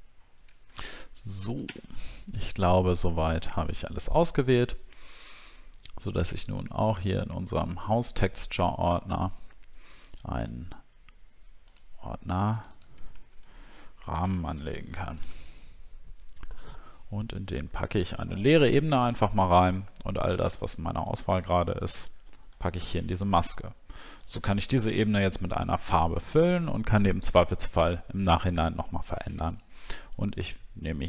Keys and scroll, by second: 0.1 alt+scroll down 1, 1.8 alt+scroll down 10, 14.1 shift+r.